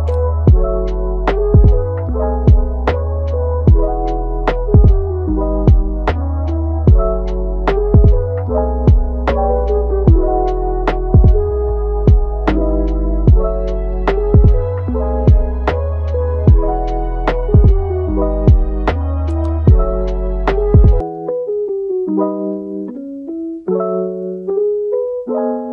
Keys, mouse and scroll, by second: 0.4 click, 0.7 g, 1.4 middle click, 1.9 click, 2.2 g, 3.6 click, 4.0 g, 4.8-5.1 scroll up 1, 5.1-6.2 middle drag, 6.2 g, 7.8 scroll down 2, 8.0 middle click, 8.5 Tab, 8.9-10.8 middle drag, 10.8-11.1 scroll up 3, 11.1-12.3 middle drag, 12.3 Tab, 12.8-15.5 middle drag, 15.5 click, 15.9 g, 16.9 click, 17.1 g, 17.6 click, 17.9 g, 18.6 click, 19.0 g, 20.0 click, 20.3 g, 21.4 drag, 21.9 g, 22.5 click, 22.8 g, 23.6 a, 25.4 ctrl+t.